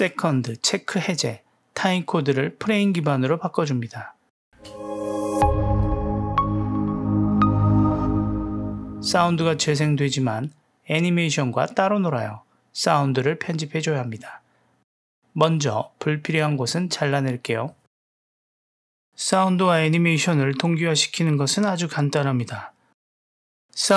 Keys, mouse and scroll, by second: 4.5 space, 10.8 space, 14.5 click, 15.2 click, 16.5 w, 16.8 click, 17.6 Delete, 20.1-20.6 drag, 20.6 space, 21.8 space, 23.3-23.9 middle drag.